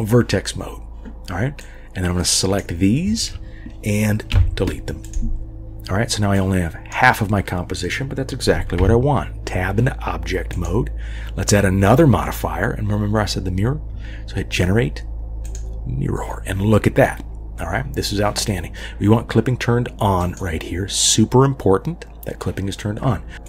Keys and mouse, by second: 1.7-2.8 drag, 4.3 Delete, 6.4 click, 8.8 Tab, 10.5-15.6 drag, 20.2 click, 23.3 click, 23.3 g.